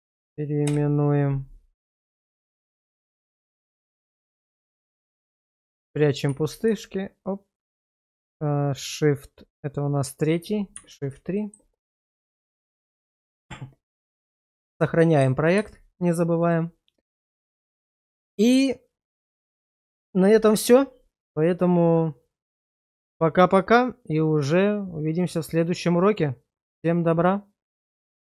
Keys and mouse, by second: 2.4 shift+middle click, 3.1 middle click, 4.9 shift+middle click, 6.3 shift+2, 8.1 shift+2, 10.8 shift+3, 11.4 shift+middle click, 11.8 middle click, 12.6 shift+middle click, 15.6 ctrl+s.